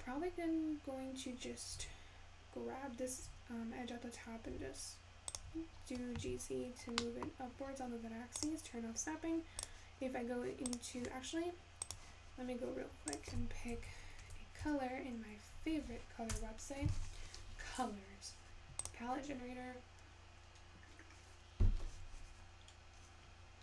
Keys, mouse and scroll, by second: 1.4 click, 4.4 g.